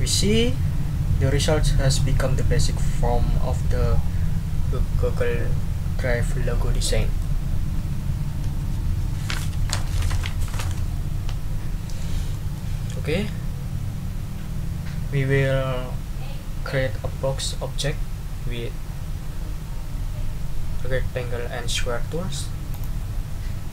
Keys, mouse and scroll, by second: 6.7 click, 12.3 click, 12.5 middle click, 22.7 click.